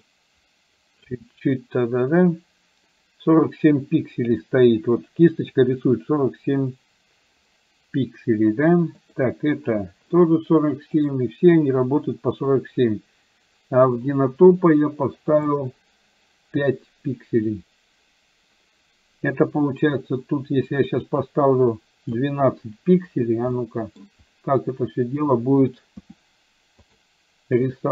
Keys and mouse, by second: 0.2-1.2 drag, 9.1 click, 15.6-18.1 drag, 20.1-22.1 drag, 23.6 middle click, 26.1 f, 27.7-27.9 drag.